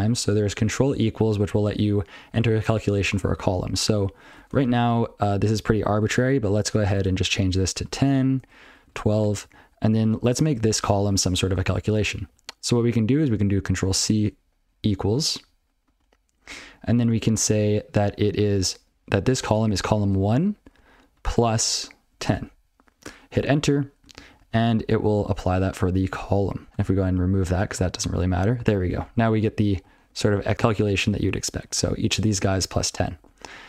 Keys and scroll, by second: 0.0 ctrl+p, 0.2 ctrl+p, 0.3 ctrl+p, 1.0 ctrl+n, 1.3 ctrl+p, 1.5 ctrl+n, 1.7 ctrl+p, 1.7 ctrl+n, 2.3 ctrl+n, 2.8 ctrl+n, 3.0 ctrl+n, 3.2 ctrl+n, 3.2 ctrl+n, 3.6 ctrl+f, 4.5 ctrl+alt+space, 4.8 ctrl+w, 5.4 ctrl+/, 5.9 ctrl+a, 6.0 ctrl+n, 6.3 ctrl+f, 6.5 ctrl+f, 6.9 ctrl+alt+k, 7.5-9.4 typing, 9.4 ctrl+p, 9.5 ctrl+f, 10.0 ctrl+f, 10.4 ctrl+b, 10.8 ctrl+alt+space, 11.0 ctrl+w, 11.3 ctrl+f, 12.2 ctrl+n, 12.4 ctrl+p, 19.3 $, 20.0 1, 21.8-22.7 typing, 24.1 ctrl+n, 24.4 ctrl+n, 24.6 ctrl+n, 24.8 ctrl+p, 24.9 ctrl+p, 25.5 ctrl+n, 25.7 ctrl+n, 25.9 ctrl+n, 26.4 ctrl+p, 26.7 ctrl+f, 26.7 ctrl+k, 27.7 ctrl+c, 28.4 ctrl+p, 28.6 ctrl+p, 28.9 ctrl+p, 29.2 ctrl+a, 29.3 ctrl+f, 29.4 ctrl+n, 29.8 ctrl+f, 30.1 ctrl+f, 30.3 ctrl+f, 30.4 ctrl+n, 30.5 ctrl+p, 30.9 ctrl+n, 31.2 ctrl+n, 31.5 ctrl+p, 31.7 ctrl+p, 32.0 ctrl+f, 32.1 ctrl+p, 32.2 ctrl+f, 32.3 ctrl+n, 32.5 ctrl+n, 32.7 ctrl+n, 32.9 ctrl+p, 33.1 ctrl+n.